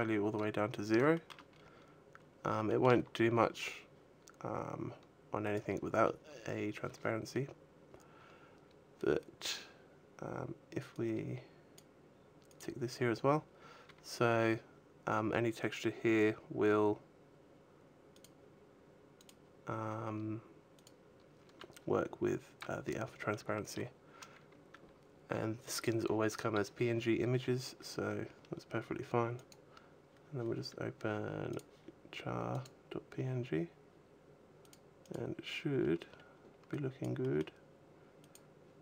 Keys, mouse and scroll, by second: 0.9 shift+middle click, 1.3-2.0 scroll up 1, 2.0-2.5 scroll down 2, 2.5 shift+middle click, 5.2 click, 7.6-8.4 scroll down 6, 9.8-10.2 scroll down 2, 10.7 click, 12.9 click, 12.9-13.2 scroll up 5, 14.0-15.6 scroll up 4, 17.9 click, 20.5 click, 27.2-27.6 scroll down 3, 27.8-28.3 scroll down 1, 29.1 click, 32.4 click, 34.4 click, 34.8 click, 35.6-36.4 scroll up 4, 36.4 click, 36.9 middle click, 38.0 click.